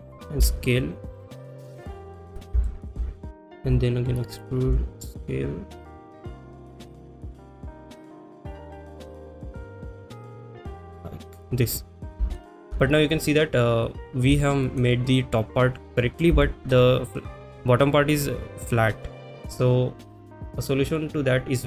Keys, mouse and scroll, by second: 2.4 click, 2.4 s, 2.7 shift+middle click, 4.4 click, 4.4 e, 5.6-11.4 typing, 5.9 click, 6.2 click, 6.6 click, 6.7 shift+middle click, 7.1 click, 7.6 click, 7.8 click, 8.4 click, 8.5 shift+middle click, 9.1 click, 9.5 click, 9.6 shift+middle click, 10.5 click, 11.4 click, 12.4 shift+middle click, 14.5 shift+middle click, 16.5 shift+middle click, 20.7 click.